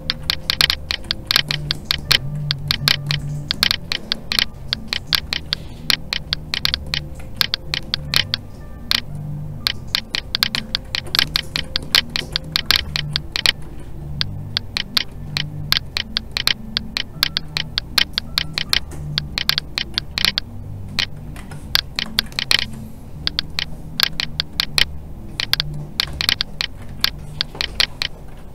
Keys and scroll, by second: 7.2 alt+a, 13.6 alt+a, 18.7 alt+a, 21.3 ctrl+z, 26.8 alt+a.